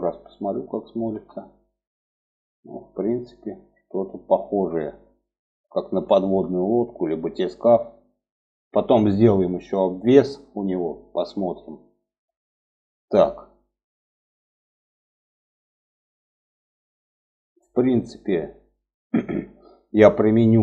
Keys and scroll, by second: 0.4 Tab.